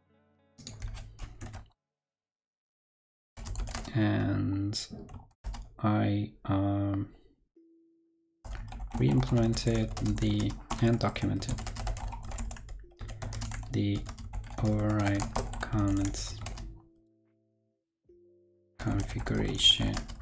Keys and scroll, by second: 0.8 super+v, 1.3 super+Right.